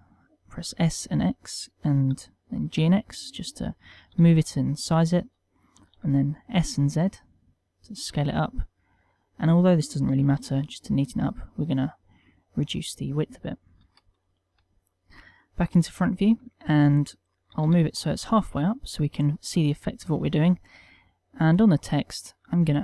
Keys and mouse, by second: 1.3 click, 2.5 g, 3.7 click, 4.2 g, 5.3 click, 5.8 s, 7.8 click, 8.1 middle click, 10.1 s, 11.1 click, 11.3 middle click, 12.4 middle click, 13.7 KP_1, 14.5 shift+middle click, 15.7 ctrl+middle click, 16.1 shift+middle click, 17.5 g, 18.2 click, 18.8 click, 21.5 click, 22.4 click.